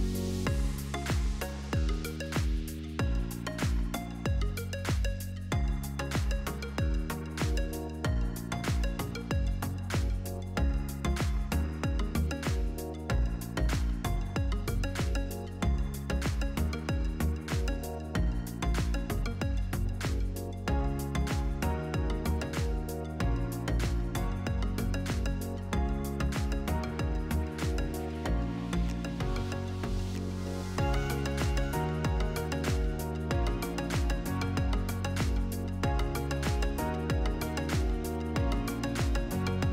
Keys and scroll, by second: 6.7 shift+s, 7.0 t, 8.7-10.7 typing, 13.5-14.7 typing, 24.1 Left, 25.8 Up, 29.9-32.8 typing, 35.1 space, 37.8 1, 38.0 Tab, 38.2 1, 38.8 Return.